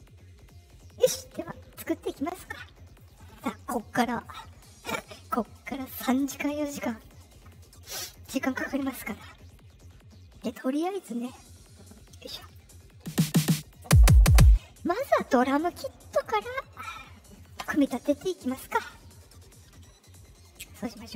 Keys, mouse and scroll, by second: 2.8 click, 8.1 click, 13.6 click.